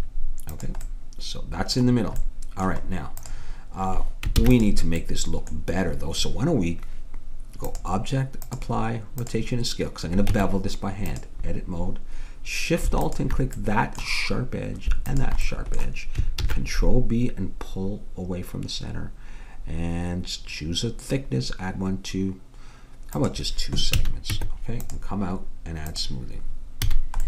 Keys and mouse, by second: 4.4 ctrl+s, 10.3 Tab, 13.0-14.8 drag, 15.5 click, 16.4 ctrl+b, 24.0 a, 24.4 Tab, 26.0-27.2 drag, 26.9 a.